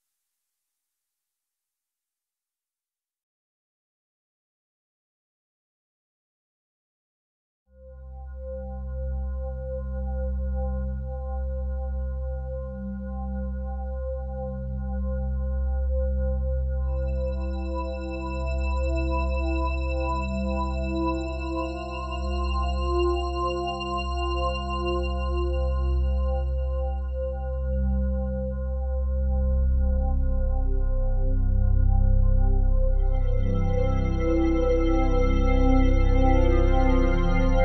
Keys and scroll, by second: 34.9 p.